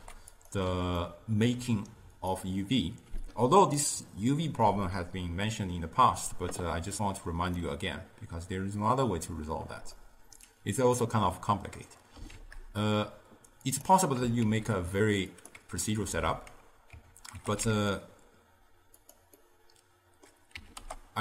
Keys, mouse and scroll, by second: 0.0 g, 1.0-2.2 ctrl+middle drag, 2.2 click, 7.1 click, 10.0-12.4 middle drag, 12.4 shift+a, 13.7-14.5 drag, 14.5 shift+a, 17.0 Tab, 17.4 g, 19.4-20.6 middle drag, 20.6 s.